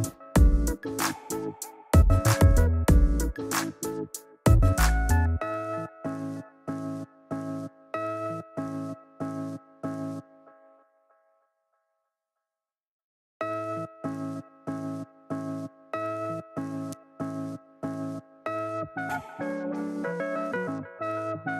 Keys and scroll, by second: 2.2 shift+Down, 7.6 super+z, 9.2 super+t, 11.8 shift+super+z.